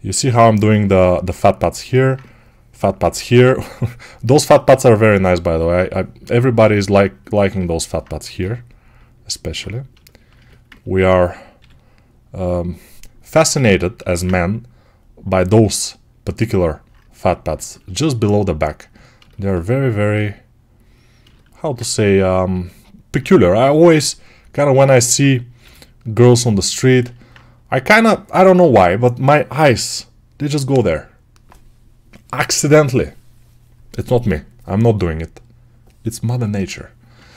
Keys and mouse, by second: 8.3 g, 11.4 g, 16.5-25.5 alt+right drag, 23.1 1, 25.5 g.